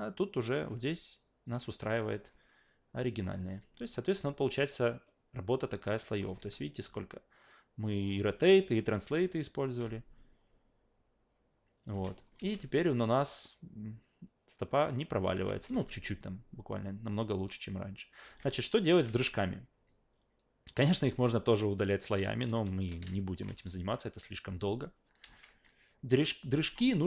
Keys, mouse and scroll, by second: 1.4 click, 3.2 alt+middle click, 5.9 click, 6.2 alt+middle click, 6.4 alt+a, 9.3-9.7 alt+drag, 9.8 alt+v, 11.9 alt+v, 12.2 click, 12.4 alt+v, 15.3 alt+v, 15.5 click, 15.7 alt+v, 17.4-18.1 alt+drag, 18.2 alt+v, 18.9 click, 19.9 alt+click, 20.8 alt+v, 21.2 alt+click, 22.0 alt+click, 23.3 click, 23.5 alt+v, 25.2 alt+v.